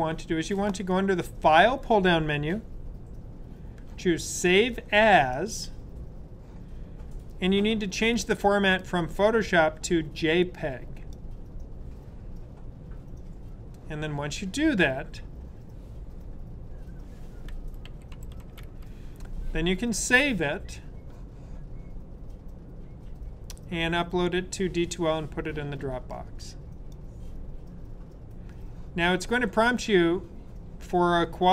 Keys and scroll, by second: 17.5-19.0 typing.